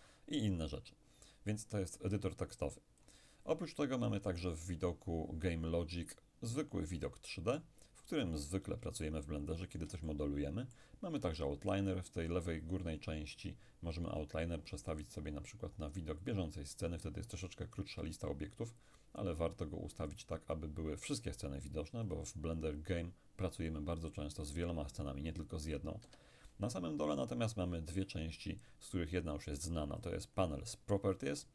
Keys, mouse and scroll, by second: 2.6 click, 6.2-7.8 middle drag, 7.8-8.5 scroll up 2, 8.5-9.1 scroll down 3, 9.1-11.8 shift+middle drag, 14.9 click, 16.3 click, 20.2 click, 22.1 click, 24.4 click, 26.1 Escape, 29.4 click.